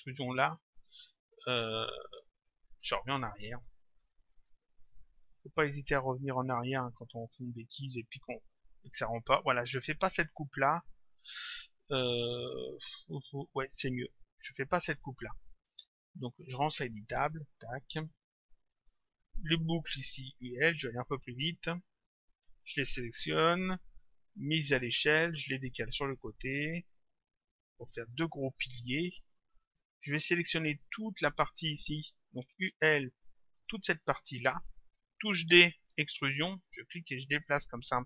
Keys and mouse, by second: 2.4 click, 6.6 click, 17.2 click, 18.8 click, 20.2 u, 22.3 shift+click, 24.5 click, 25.9 click, 29.7 click, 32.5 u, 33.6 click, 35.5 d, 36.6 click.